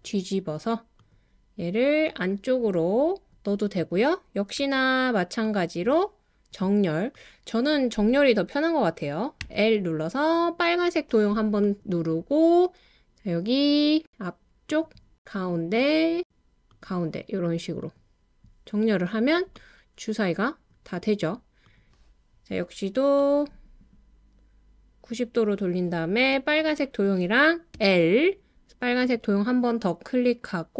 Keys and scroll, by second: 4.6 w, 9.2-9.9 typing, 27.7 l.